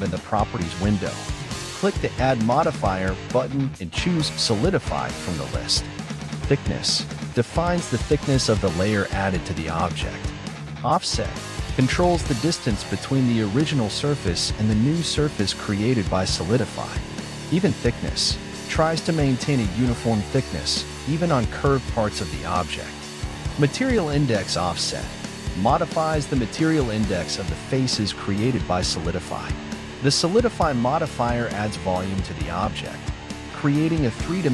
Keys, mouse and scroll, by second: 1.5 z, 5.0 click, 5.5 scroll up 3, 5.9-8.9 middle drag, 8.9 scroll up 5, 9.7-14.6 shift+middle drag, 14.6-16.4 drag, 16.4-16.8 scroll down 4, 16.8-20.2 middle drag, 20.2-23.5 drag, 25.9 click, 26.9-27.3 scroll down 4, 27.3-30.6 middle drag, 31.1 click, 31.8 click, 32.8-34.5 middle drag.